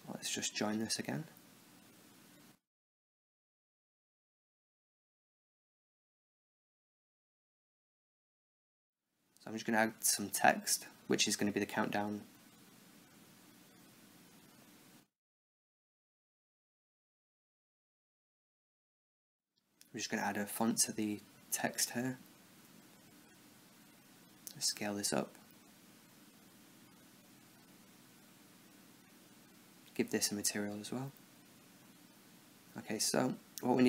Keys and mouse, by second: 0.2-1.3 right drag, 1.6-3.2 middle drag, 3.2-4.8 drag, 6.2 shift+a, 8.5 Tab, 8.9-11.0 typing, 11.8 Tab, 12.6 s, 15.8 click, 18.2 click, 20.5 click, 22.5 s, 23.7-25.0 drag, 24.6 s, 25.6-28.7 drag, 29.0-31.2 drag, 31.4 KP_7, 32.3-33.8 middle drag.